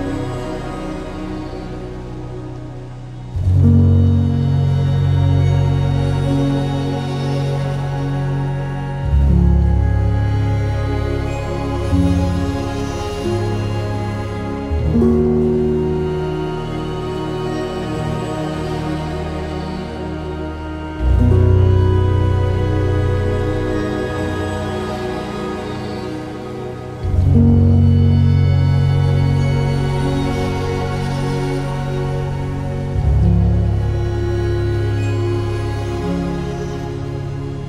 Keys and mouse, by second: 2.6 click, 3.4 g, 4.0 click, 4.6 r, 5.9 click, 8.0 ctrl+r, 8.4 click, 9.6 click, 10.1 ctrl+r, 10.3 ctrl+click, 11.1 click, 11.6 ctrl+r, 11.9 ctrl+click, 12.6 click, 16.2-17.3 ctrl+KP_Add, 17.7 2, 19.8 ctrl+b, 24.8 1, 25.1 click, 25.9 g, 26.1 g, 27.1 g, 27.3 g, 27.8 click, 28.4 click, 28.5 g, 28.7 g, 29.7 click, 29.9 g, 30.1 g, 30.4 click, 34.6-37.1 ctrl+KP_Add.